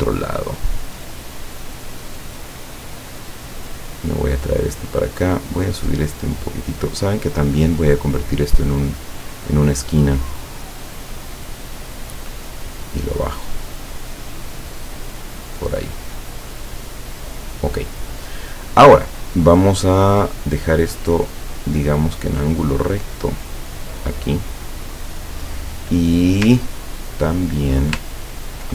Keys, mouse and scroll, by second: 1.5-4.7 drag, 5.4-6.9 drag, 7.3 click, 9.1 click, 10.5-12.0 drag, 12.4-15.6 drag, 16.0-17.6 drag, 20.1-22.0 drag, 22.5-24.6 drag, 26.7-27.7 ctrl+drag, 28.2 ctrl+scroll down 2.